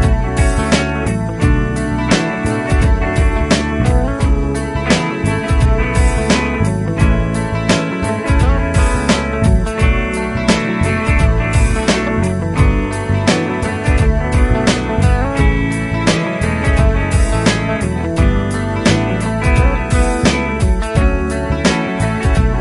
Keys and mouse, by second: 1.7 ctrl+click, 5.1 ctrl+click, 6.8 F4, 9.7 double click, 20.7 right click.